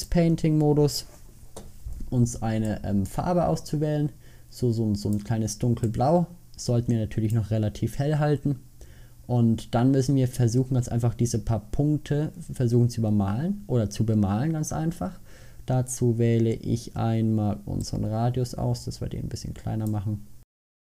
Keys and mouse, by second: 8.1-10.4 middle drag, 10.6 middle click.